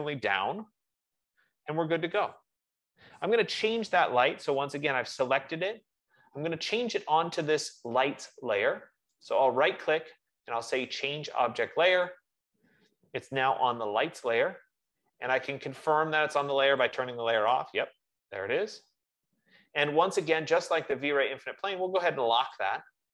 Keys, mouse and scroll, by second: 9.6 right click, 12.4 click, 17.1 click, 17.7 click.